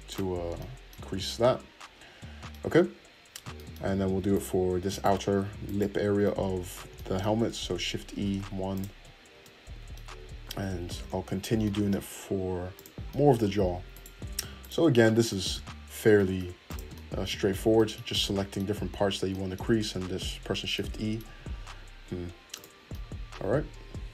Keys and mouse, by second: 0.1 click, 1.0 Tab, 2.7 Tab, 4.3 alt+click, 4.9 alt+click, 5.6 alt+middle click, 5.6 alt+right click, 5.7-8.9 alt+middle drag, 8.1 shift+e, 8.9 Tab, 10.2 Tab, 12.7 click, 13.1 middle click, 13.9 alt+click, 14.0 alt+middle click, 14.6 alt+click, 14.6-17.6 alt+middle drag, 16.1 shift+e, 17.6 shift+click, 19.1-22.5 middle drag, 21.2 Tab, 22.5 click, 22.8-24.1 middle drag.